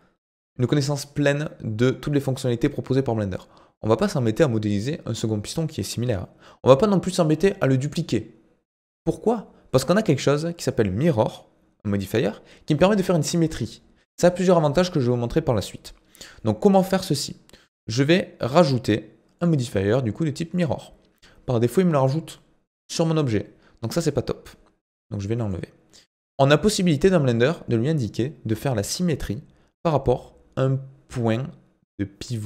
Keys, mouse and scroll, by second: 19.4-28.6 drag.